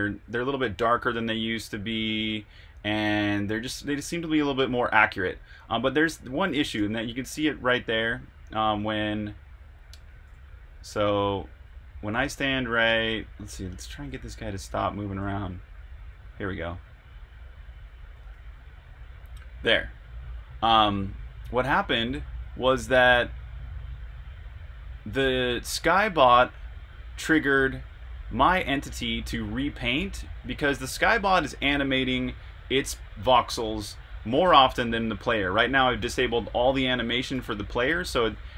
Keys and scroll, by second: 0.0-0.7 typing, 2.1-4.6 typing, 7.0 typing, 10.0-18.8 typing.